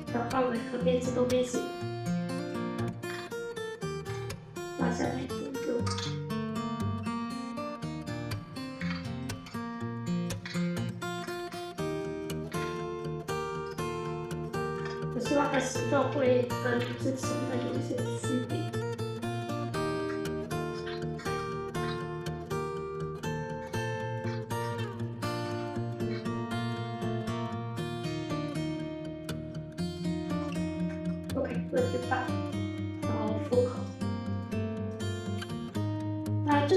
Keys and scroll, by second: 2.9 2, 3.9 w, 5.8 alt+f, 8.2-10.3 typing, 12.1 3, 14.6 Delete, 15.8 alt+f, 16.6 1, 17.4 w, 20.7 2, 21.1 ctrl+shift+e, 21.7 1, 22.1 r, 23.5 w, 24.1 2, 24.6 ctrl+shift+e, 25.8 ctrl+z, 25.9 1, 26.6 r, 30.4 p.